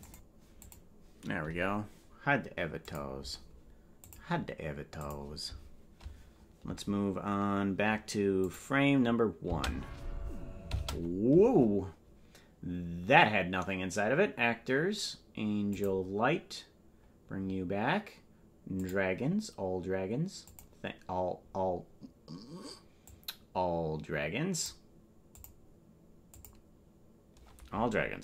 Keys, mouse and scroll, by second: 8.4 click, 10.5 space, 10.8 space, 12.7-13.4 scroll down 1, 13.4-16.5 scroll down 3, 16.5 click, 17.3 scroll down 2, 17.4 scroll up 1, 17.4-19.4 scroll down 1, 19.4-21.1 drag, 21.4 scroll down 1, 21.5-23.7 scroll up 2, 23.7-24.7 drag, 26.0 click, 26.9 click.